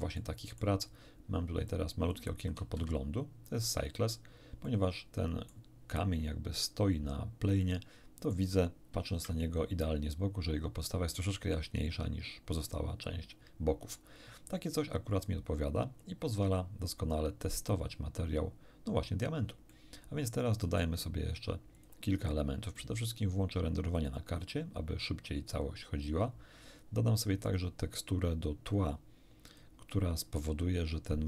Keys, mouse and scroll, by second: 0.1 shift+middle click, 1.7 click, 2.6 shift+z, 4.7-5.7 middle drag, 7.6 middle click, 9.0 1, 16.0-17.3 drag, 17.5 scroll up 2, 17.9 scroll down 2, 18.7 scroll down 2, 19.7-21.0 shift+middle drag, 21.7 click, 23.1 click, 23.9 click, 27.5 click, 29.5 click.